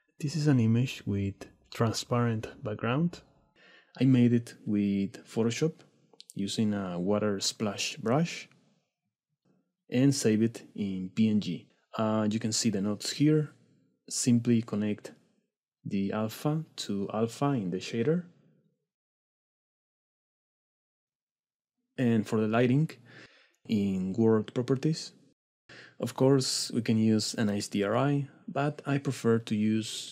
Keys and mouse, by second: 2.7-3.1 middle drag, 3.7-4.4 middle drag, 9.9-10.5 drag, 11.2 middle click, 12.1-12.5 drag, 12.6 click, 13.7-15.1 drag, 16.0 click, 17.7-20.0 drag, 22.2 drag, 22.7 click, 25.5-30.1 drag.